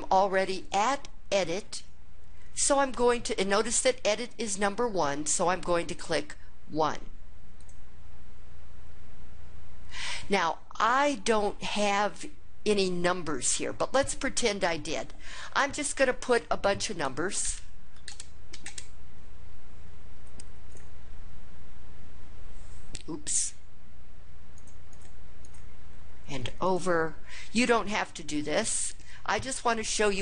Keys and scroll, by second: 7.3 1, 17.1 1, 17.2 Return, 17.7 1, 17.8 Return, 18.3 1, 18.4 Return, 24.4 Up, 24.7 Up, 25.2 Up, 26.4 Right, 29.3 2.